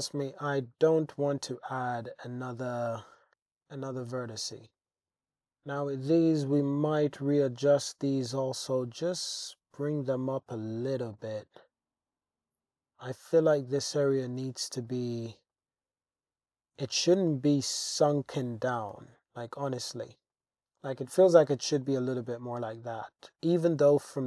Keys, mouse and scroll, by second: 3.3 alt+z, 4.1 shift+middle click, 5.1 super+z, 5.8 g, 6.0 g, 7.6 click, 8.4 g, 8.7 z, 10.5 click, 10.9 alt+z, 11.2-14.0 drag, 14.9 drag, 15.5 click, 16.9 g, 17.2 z, 18.1 click, 18.8 g, 18.9 g, 20.3 click, 20.4 Tab, 20.9 shift+click, 22.0 click, 22.0 middle click, 22.7 shift+click, 24.0 shift+click.